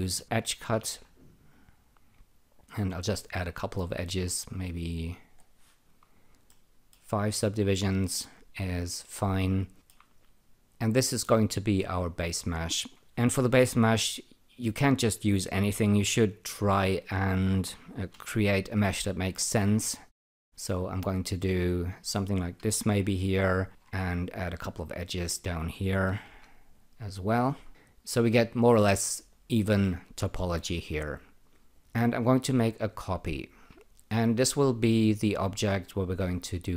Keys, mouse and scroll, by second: 0.0-1.3 typing, 1.5-2.9 drag, 6.5 alt+middle click, 7.2 alt+click, 9.7 alt+middle click, 16.3-18.7 typing, 17.3 click, 18.7-21.8 drag, 22.6-24.2 typing, 23.4 click, 24.3 click, 26.2 m, 26.7-28.3 drag, 29.8 alt+middle click, 30.8 alt+click, 32.9 ctrl+click.